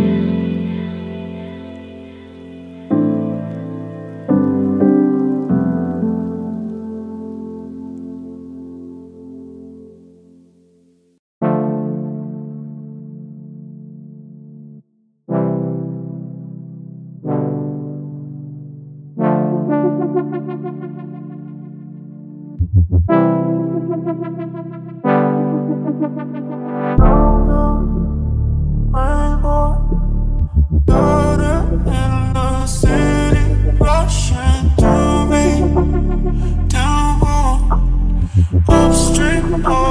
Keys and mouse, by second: 4.4 click, 7.0 click, 8.9 click, 11.2 click, 13.4 click, 14.6 click, 17.2 click, 19.2 Tab, 19.6 shift+z, 20.6 g, 20.7 x, 23.2 shift+right click, 23.5 right click, 23.9 x, 25.1 shift+right click, 25.4 right click, 25.8 x, 26.3 shift+click, 28.1 click, 29.4 shift+z, 31.1 3, 31.5 click, 32.9 shift+click, 33.8 shift+click, 34.4 middle click, 35.1 e, 36.5-37.8 drag, 38.3 KP_3, 38.5 shift+z, 39.1 g, 39.2 y.